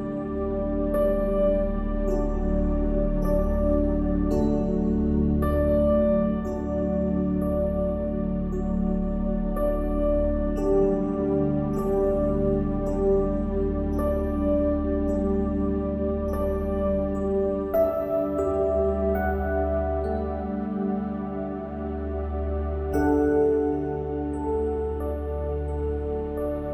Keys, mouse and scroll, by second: 0.2 middle click, 0.8 middle click, 2.0 click, 7.0 click, 7.6 g, 9.2 ctrl+r, 10.6 ctrl+r, 12.1-13.2 drag, 13.3 click, 14.6 s, 17.6 Tab, 17.8 Tab, 18.2 ctrl+r, 19.1 ctrl+r, 19.4 ctrl+r, 20.6 ctrl+r, 21.4 middle click, 22.6 ctrl+r, 23.5 ctrl+r, 24.7 click, 26.0 ctrl+r, 26.6 ctrl+r.